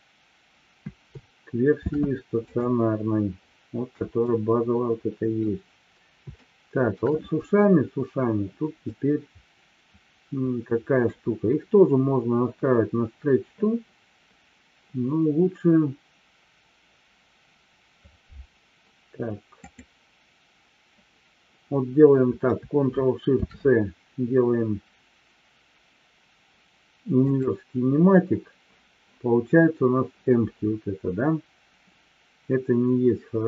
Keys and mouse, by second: 1.8 ctrl+shift+c, 4.2-5.4 middle drag, 6.4-7.0 shift+middle drag, 8.8-11.1 middle drag, 19.6 click, 23.3 ctrl+shift+c.